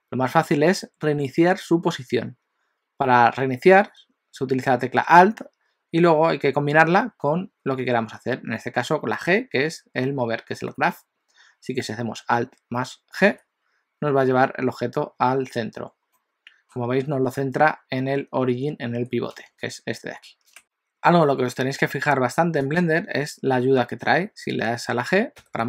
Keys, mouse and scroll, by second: 13.3 alt+g, 16.1 middle click, 16.8 scroll up 2, 22.6 click, 25.4 g.